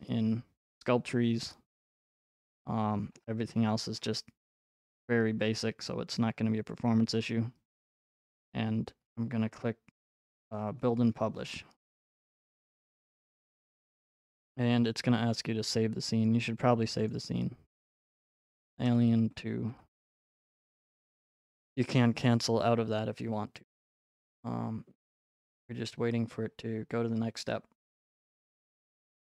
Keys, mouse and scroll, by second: 1.8-2.9 scroll, 3.1-5.6 scroll, 5.6 scroll, 12.8 click, 16.3 click, 16.4 click, 17.1 click, 17.8-19.6 typing, 19.7 Return, 21.5-22.2 typing.